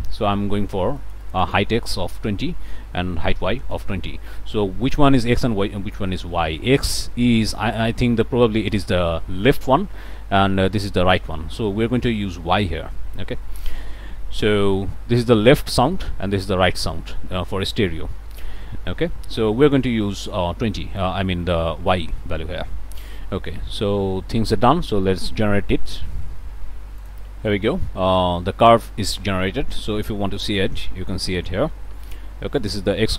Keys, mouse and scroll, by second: 1.0 click, 2.0-3.7 typing, 22.8 click, 25.9 click, 27.0 click, 30.4 click, 32.6 click.